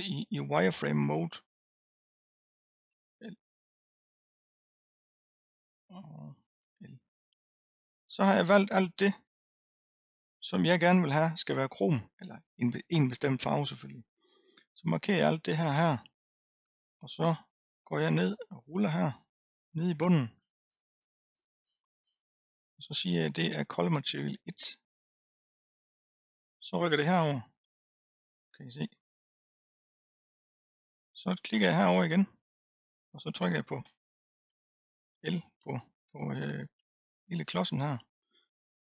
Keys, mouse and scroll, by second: 1.6 click, 3.0 l, 3.8-6.6 middle drag, 6.6 l, 7.6-10.0 middle drag, 10.0-10.6 scroll down 2, 10.6-11.7 scroll down 1, 14.6 drag, 18.3-24.8 scroll down 173, 25.0-25.8 drag, 25.8-27.4 scroll down 7, 31.6 click, 33.9 l, 35.2 l, 36.9 l.